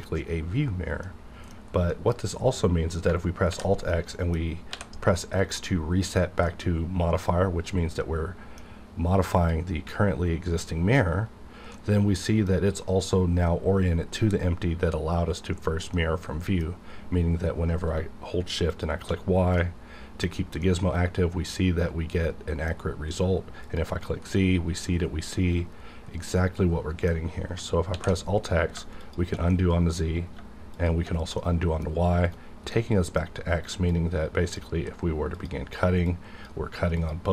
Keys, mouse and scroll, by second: 1.0 middle click, 1.4-1.9 scroll down 1, 1.9 middle click, 3.5 alt+x, 3.9 middle click, 4.3-4.7 scroll down 1, 4.7 x, 6.4-9.4 middle drag, 9.4 click, 11.7-15.2 middle drag, 15.9-19.0 middle drag, 18.7 shift+click, 19.6 middle click, 20.2-20.6 scroll down 1, 20.6 middle click, 20.6-24.3 middle drag, 24.3 middle click, 24.5-26.2 drag, 26.2-27.9 middle drag, 27.9 alt+x, 29.0 shift+click, 29.5 middle click, 30.7 shift+click, 31.4 middle click, 32.2 right click, 32.7 middle click, 33.1 middle click, 33.8-37.0 drag.